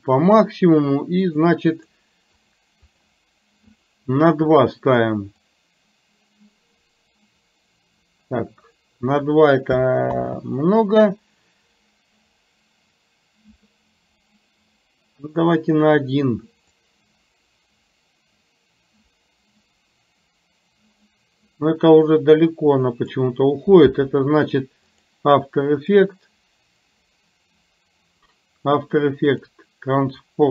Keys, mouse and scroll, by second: 1.3 click, 1.9 click, 2.4 click, 3.8 click, 5.5-9.2 drag, 16.9-23.3 drag, 24.9 click, 26.0-28.3 drag, 29.4 click.